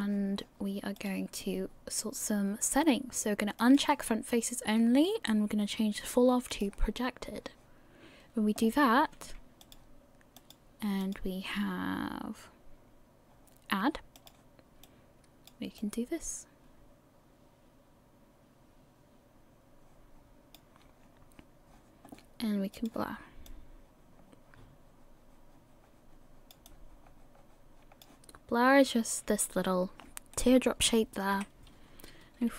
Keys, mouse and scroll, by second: 1.0 click, 10.4 click, 14.8 click, 15.8 click, 22.8 click, 23.5 click, 26.7 click, 30.3 middle click, 31.3 KP_1.